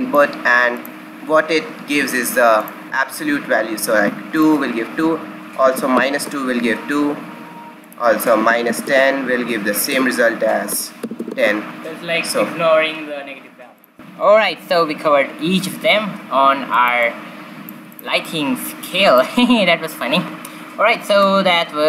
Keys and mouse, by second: 4.3-6.1 drag, 7.8-9.6 drag, 9.5 KP_Enter, 13.7 click, 15.7 shift+z, 16.7 middle click, 17.4-18.9 middle drag, 19.2 middle click.